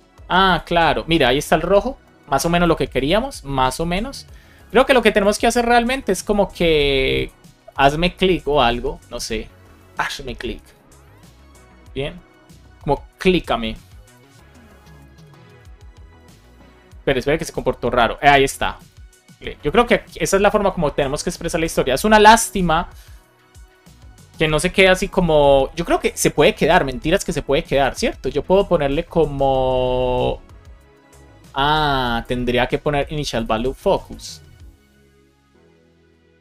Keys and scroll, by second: 5.9 shift+super+Left, 6.0 shift+super+Down, 6.0 shift+super+Left, 8.4 shift+super+Left, 8.9 BackSpace, 9.8 super+s.